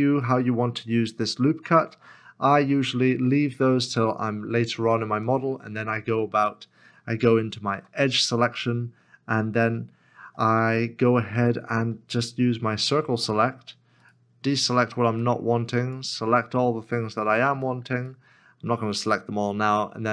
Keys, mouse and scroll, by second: 7.7 2, 13.1 2, 14.0 right click, 14.8 c, 18.0 c, 18.0 right click.